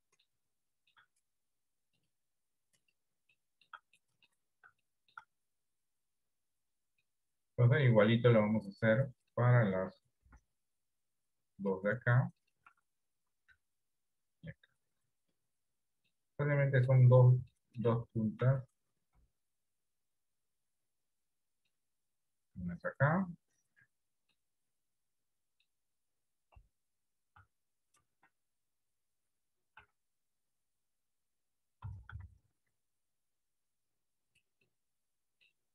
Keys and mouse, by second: 0.0 middle click, 0.8 shift+middle click, 2.0-3.0 drag, 3.4 shift+middle click, 4.1 middle click, 4.9 shift+middle click, 7.2 middle click, 10.3 shift+d, 13.6 g, 16.2 middle click, 17.6 shift+middle click, 18.6 KP_7, 19.2 KP_1, 22.6 g, 24.6-25.7 middle drag, 26.6 KP_1, 28.2 ctrl+KP_7, 29.9 r, 31.9 r, 34.8 middle click.